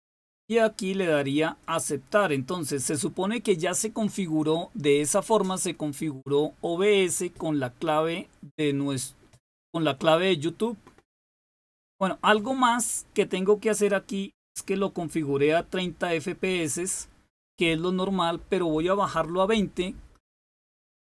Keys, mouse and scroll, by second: 1.6 click.